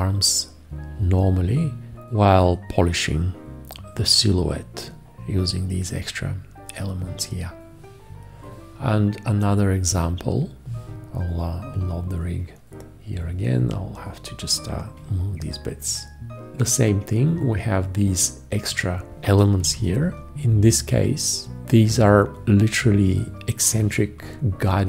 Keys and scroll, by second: 19.6 v.